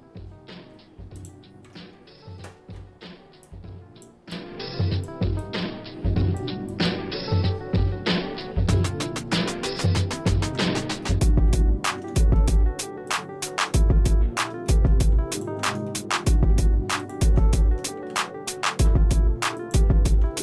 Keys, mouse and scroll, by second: 1.2 alt+shift+click, 8.2 middle click, 8.8 shift+middle click, 10.5 ctrl+z, 11.1 middle click, 12.2 shift+middle click, 13.1 ctrl+shift+click, 13.8 shift+middle click, 14.7 middle click, 15.4 ctrl+click, 15.9 shift+middle click, 17.0 ctrl+shift+click, 18.1 ctrl+z, 19.6 ctrl+click.